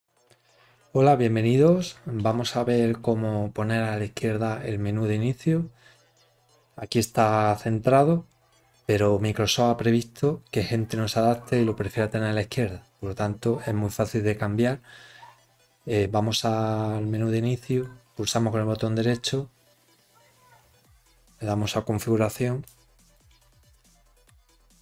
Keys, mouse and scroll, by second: 17.6 right click, 21.9 click.